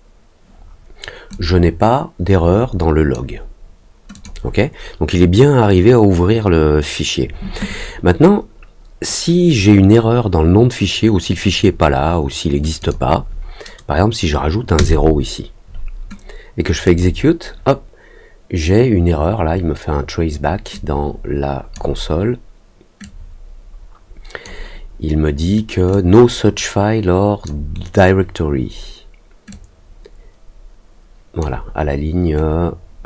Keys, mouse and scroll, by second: 1.2-3.1 drag, 4.1 click, 12.7 click, 16.8 click, 20.7-21.7 drag, 23.0-24.4 drag, 25.9-27.4 drag, 29.4-31.3 drag.